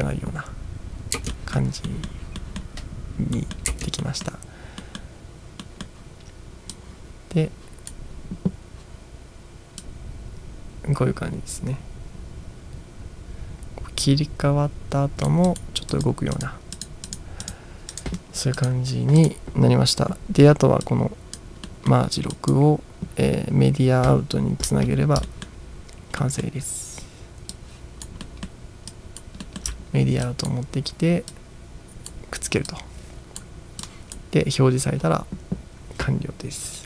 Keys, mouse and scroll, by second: 1.3 space, 1.4 middle click, 1.9 middle click, 2.6 middle click, 3.4 middle click, 3.7 space, 4.2 middle click, 4.9 middle drag, 5.7 middle drag, 6.9-8.0 drag, 10.1-15.4 drag, 15.5 drag, 15.9 drag, 16.8 click, 18.0 click, 18.6-19.2 drag, 20.9-21.4 drag, 21.7-22.0 middle drag, 22.4 drag, 25.0 ctrl+scroll down 2, 25.3 middle click, 26.2 middle drag, 27.6 click, 28.3-28.6 middle drag, 29.0-29.4 drag, 29.6 middle click, 29.8 ctrl+scroll up 4, 30.3 drag, 31.4-32.3 drag, 32.8-33.5 drag, 33.8 click.